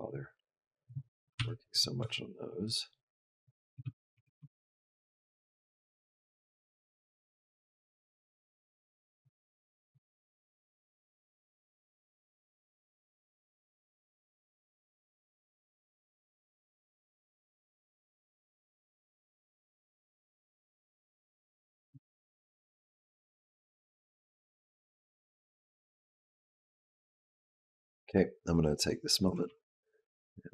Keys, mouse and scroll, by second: 1.2 r, 1.8 g, 3.3 click, 3.6 g, 3.7 click, 3.9 g, 5.7 click, 9.6 space, 21.6 space, 22.3 click, 27.7 click, 28.6 click, 29.0 g.